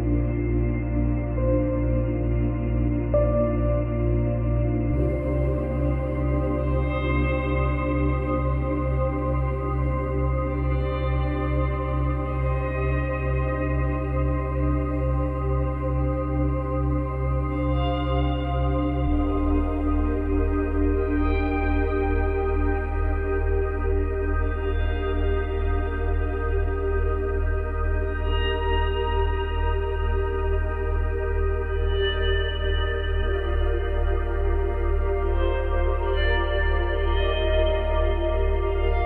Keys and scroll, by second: 3.5 space, 18.5 space, 20.2 space, 23.1 ctrl+z, 27.6 F9, 29.6 ctrl+z.